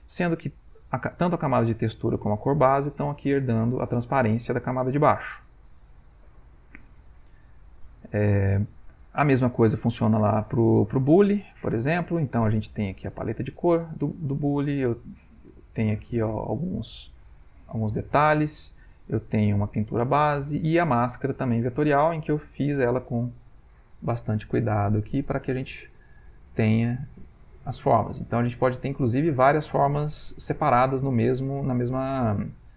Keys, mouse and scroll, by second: 0.7 click, 1.9 click, 5.3 click, 5.8-7.0 middle drag, 7.1 ctrl+middle click, 9.3 click, 9.8 click, 11.4 middle click, 12.2 middle click, 13.1 click, 13.6 click, 16.1 click, 16.5 click, 16.9 click, 19.1 click, 19.8 click, 20.7 click, 21.3 middle click, 21.9-22.9 middle drag, 23.7 click, 24.7 click, 25.1-27.2 middle drag, 27.3 ctrl+middle click, 27.7 ctrl+middle click, 28.6 click, 29.3 click, 30.8 click, 31.6 click, 31.9 middle click, 32.6 ctrl+middle click, 32.6 ctrl+scroll.